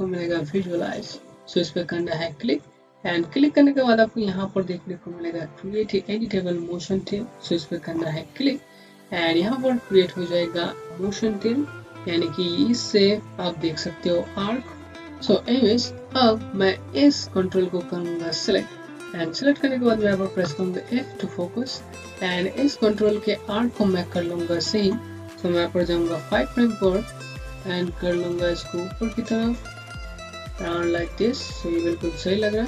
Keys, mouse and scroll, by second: 1.8 F4, 4.2 click, 8.2 click, 16.1 z, 18.0 z, 18.2 click, 18.7 scroll up 1, 20.3 f, 21.1 scroll up 1, 21.6 alt+middle click, 26.2 ., 27.2 click, 31.3 scroll down 1, 31.8 scroll up 1.